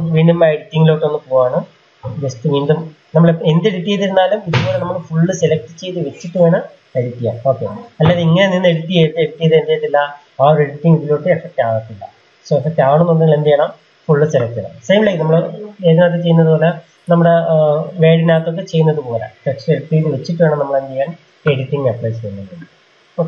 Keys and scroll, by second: 2.3 ctrl+a.